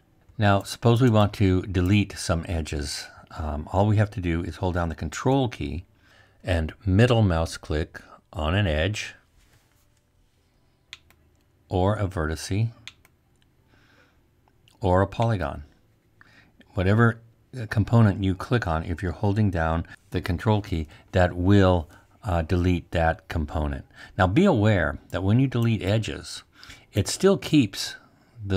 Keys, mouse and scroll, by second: 4.6-9.7 middle drag, 4.6-5.1 scroll.